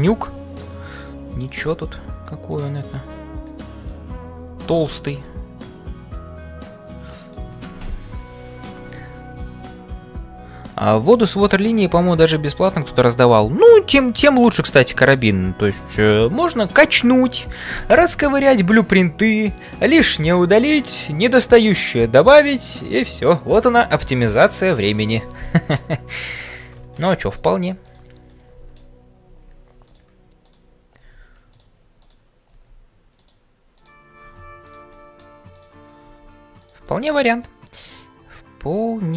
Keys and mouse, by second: 0.6 click, 1.4 click, 2.2 middle click, 2.9 click, 3.5 middle click, 5.2-7.4 middle drag, 26.3 shift+middle click, 26.9 middle click, 27.8 click, 28.4 middle click, 30.4 click, 31.0 g, 34.3 g, 34.9 middle click, 36.1 g, 36.8-39.1 middle drag.